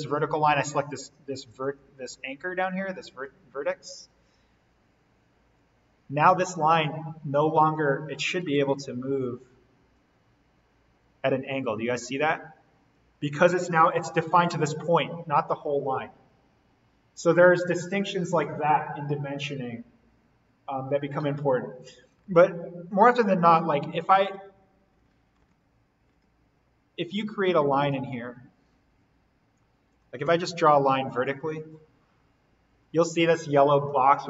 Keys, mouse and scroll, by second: 1.6 click, 4.3 Escape, 6.7 click, 8.1 Escape, 9.8-15.3 drag, 22.6 ctrl+z, 25.4 z, 27.1 z, 28.7 ctrl+z, 29.8 click, 30.2 l, 30.8 click.